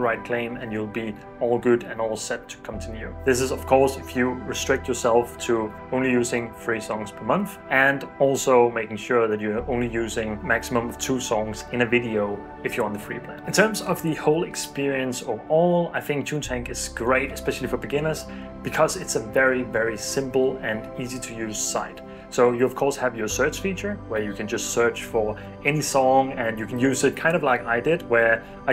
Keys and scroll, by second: 23.9-28.7 typing.